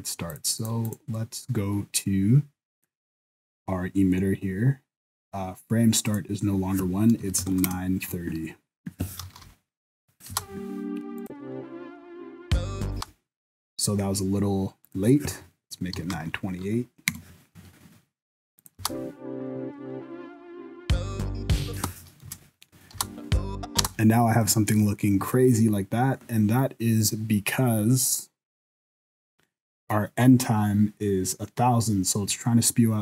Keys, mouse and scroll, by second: 0.3 click, 0.6 click, 0.9 click, 2.8 click, 6.1 click, 9.4 shift+Left, 10.3 space, 11.2 click, 12.9 space, 14.8 click, 18.6 click, 18.8 space, 21.7 space, 22.2 KP_0, 22.9 space, 23.8 space, 24.1 scroll up 5, 24.5 shift+middle click, 24.8 scroll down 4, 25.3 shift+middle click.